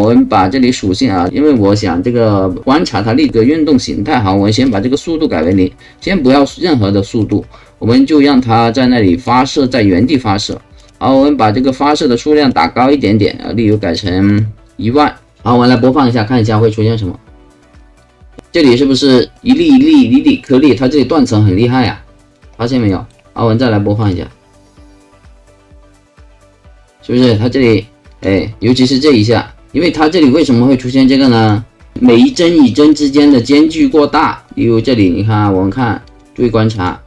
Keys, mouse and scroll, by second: 1.1 click, 5.1 KP_0, 5.4 click, 7.2 click, 9.3 click, 10.4 click, 10.8 click, 11.8 click, 12.4 click, 14.2 KP_0, 14.3 click, 15.7 click, 17.7 right click, 18.3 alt+click, 19.3 alt+right click, 20.6-22.3 alt+drag, 22.9 alt+middle click, 24.0 alt+click, 24.6 alt+click, 28.1 click, 31.3 click, 31.9 click, 32.3 click, 32.6 click, 32.9 click, 33.1 click, 33.4 click, 33.8 click, 34.4 click, 36.1 click, 36.7 click.